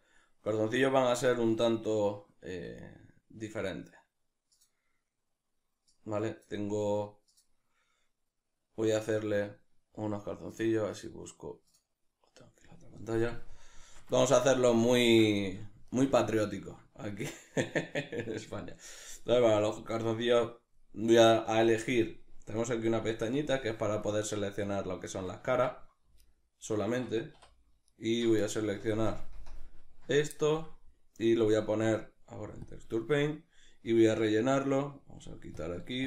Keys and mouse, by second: 22.7-24.1 drag, 24.1-25.7 right drag, 26.2-27.3 right drag, 27.9 right click, 28.8 ctrl+KP_Add, 29.4 ctrl+KP_Subtract, 30.7 middle click, 32.7 Tab, 32.7-36.0 middle drag.